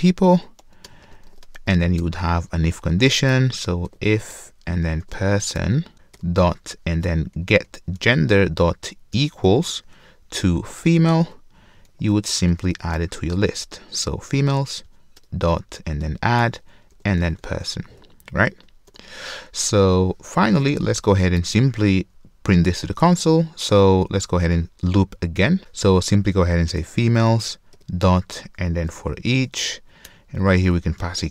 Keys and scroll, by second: 0.3 Return, 5.9 super+z, 8.0 Return, 9.6 ctrl+shift+space, 11.2 Return, 15.2 Return, 27.5 Return.